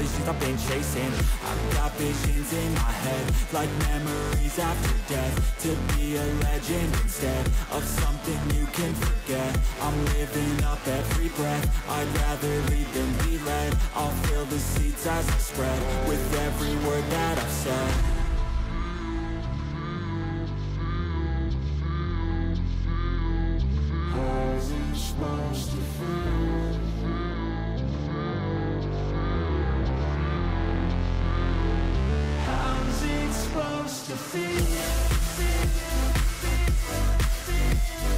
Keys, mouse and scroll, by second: 0.6 ctrl+z, 2.0 ], 25.4 ctrl+z, 26.6-28.7 scroll down 4, 29.9 scroll down 1, 30.8 double click.